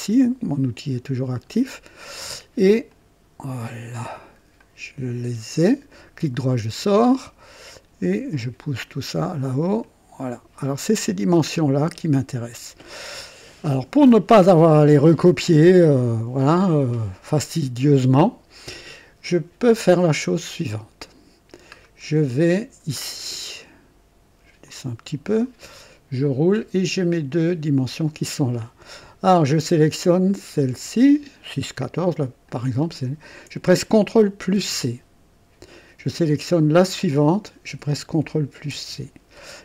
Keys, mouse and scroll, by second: 1.3 click, 2.9 click, 4.0 click, 4.6-5.4 right drag, 5.6-6.0 scroll up 1, 8.1-9.1 drag, 9.8-10.9 drag, 11.0 click, 21.8-22.1 scroll down 1, 24.6 click, 25.7-26.1 scroll down 1, 32.5 click, 34.6 ctrl+c, 37.1 click, 38.7 ctrl+c.